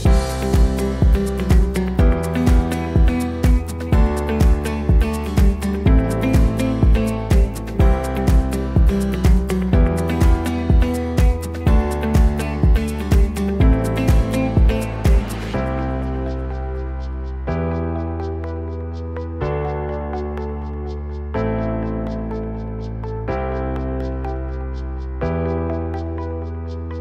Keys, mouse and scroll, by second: 3.0-7.2 middle drag, 8.9 middle click, 10.3-14.2 drag, 10.3-27.0 right drag, 15.5 Tab, 19.1-20.1 drag, 21.6 click, 24.5 click.